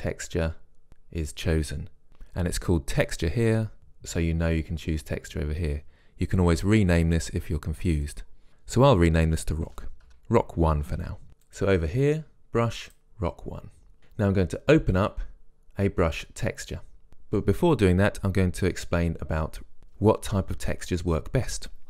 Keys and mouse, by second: 3.8-5.4 drag, 8.2 click, 11.7-13.7 drag.